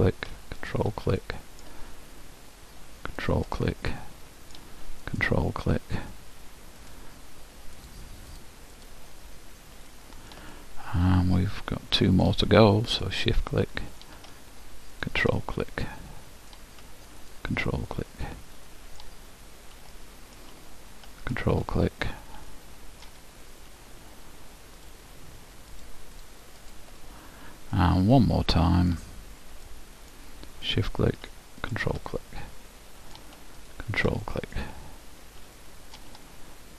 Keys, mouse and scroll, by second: 1.3-3.4 middle drag, 3.4-5.1 drag, 3.8-5.5 middle drag, 5.3-10.8 drag, 6.2-8.9 middle drag, 9.3-12.5 middle drag, 13.0-14.8 drag, 13.6-15.4 middle drag, 15.0-17.0 drag, 15.6-16.8 middle drag, 17.0 middle click, 17.7-19.2 drag, 17.9-22.3 middle drag, 21.4-23.0 drag, 22.8 middle click, 24.9-28.6 drag, 27.8-31.7 middle drag, 31.4-33.5 drag, 32.2-34.2 middle drag, 33.9-35.6 drag, 34.4-35.4 middle drag, 35.6-36.7 middle drag.